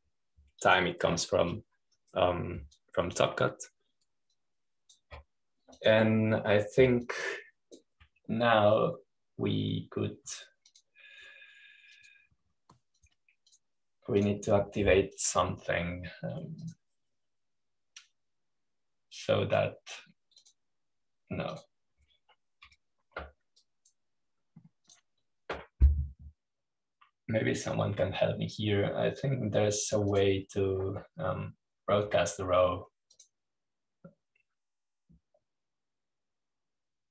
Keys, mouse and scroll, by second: 0.0 click, 1.1-2.7 drag, 5.1 click, 6.5-10.3 drag, 12.5 click, 13.8 click, 14.9 click, 16.1 click, 17.1 right click, 18.5 click, 19.3 click, 22.3 click, 23.4-24.5 drag, 25.4-27.7 drag, 29.5 click, 32.0 click, 35.1-37.1 drag.